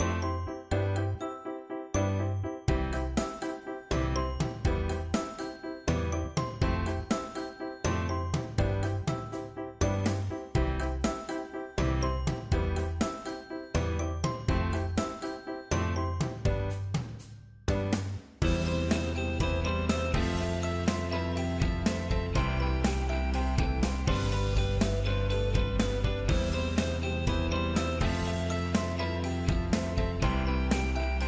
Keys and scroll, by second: 25.0 ctrl+d, 27.6 ctrl+g, 30.1 ctrl+c.